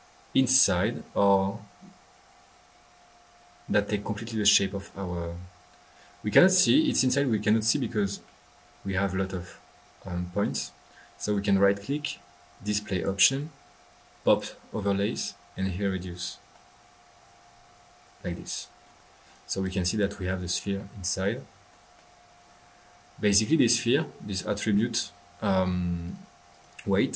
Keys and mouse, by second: 2.2-4.0 middle drag, 4.3-5.0 middle drag, 4.3-5.0 typing, 5.0-7.1 drag, 8.2-9.4 middle drag, 10.4 right click, 12.9 click, 14.2 click, 15.6-16.4 middle drag, 16.5-19.0 middle drag, 19.6 click, 20.3 middle click, 26.0 drag, 26.5 drag, 26.9 click, 26.9 click.